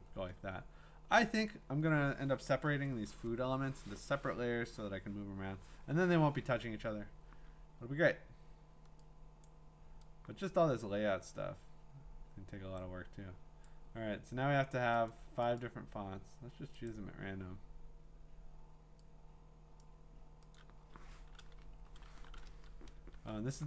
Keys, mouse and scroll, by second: 9.5 click, 10.8-12.5 drag, 13.6 click, 15.1 click, 15.6 click, 16.9 click, 19.8 click, 20.6 click, 22.5 shift+Return, 23.0 shift+Return.